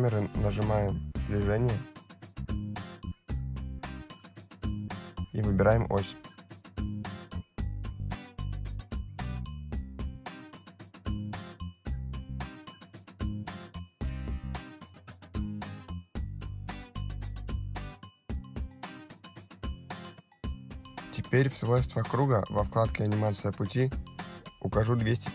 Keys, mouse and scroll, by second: 4.4 click, 8.1 middle click, 13.2 click, 17.9 click, 21.8 click, 24.1 click.